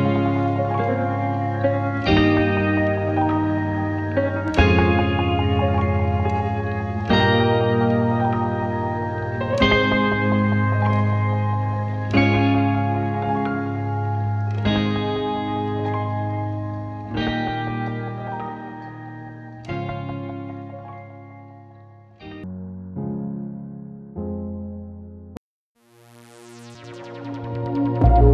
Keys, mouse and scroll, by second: 2.0-2.5 scroll up 8, 2.5 click, 3.9 Tab, 4.6 click, 5.2 right click, 6.0 click, 8.1 click, 8.5 scroll down 2, 9.1-10.6 drag, 11.1 click, 11.8 click, 14.0 scroll down 3, 14.5 click, 15.0-15.4 scroll down 3, 15.4-17.0 drag, 17.2-17.6 drag, 17.7 click, 18.5 scroll down 6, 19.2 click, 20.2 click, 20.5-21.1 scroll down 4, 21.1 click, 21.8-22.7 scroll up 6, 22.7 click, 26.4 scroll down 3, 27.0 click.